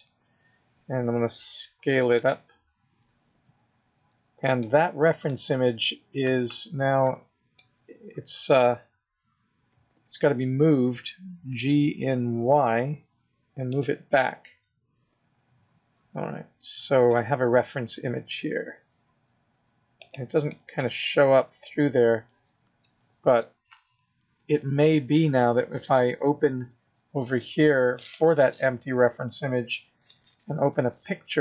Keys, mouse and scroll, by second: 1.3 s, 4.6 middle click, 5.5 scroll down 3, 5.8 middle click, 8.1-8.5 scroll up 6, 11.6 g, 14.1 middle click, 18.5 s, 20.4 middle click, 21.2-21.6 scroll down 4, 21.7-22.3 scroll up 1, 22.3-23.1 scroll down 1, 24.1 KP_0, 27.9 click.